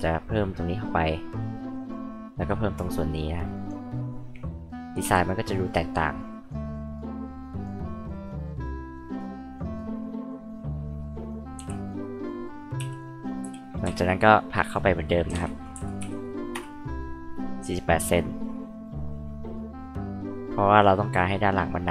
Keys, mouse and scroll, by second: 1.8 click, 2.1-2.5 scroll up 2, 3.5 click, 4.2 scroll up 2, 5.0 e, 5.6 click, 6.3 click, 6.7 click, 7.4 click, 8.1 click, 8.9 click, 9.6 click, 10.3 click, 11.1 click, 11.9-12.2 drag, 13.0 click, 13.4 h, 14.2 click, 15.5-16.5 typing, 16.5 Return, 18.0 click, 19.5 click, 20.6 click, 21.5 click.